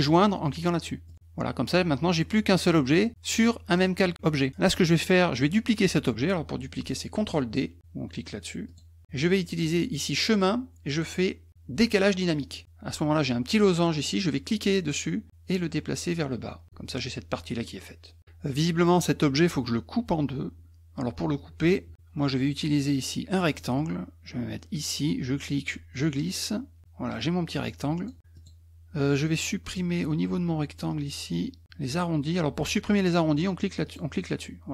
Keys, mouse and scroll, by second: 1.1 click, 8.7 click, 9.6 click, 12.4 click, 14.3-16.6 drag, 23.4 click, 25.1-28.1 drag, 28.3 click, 29.7 click, 33.8 click.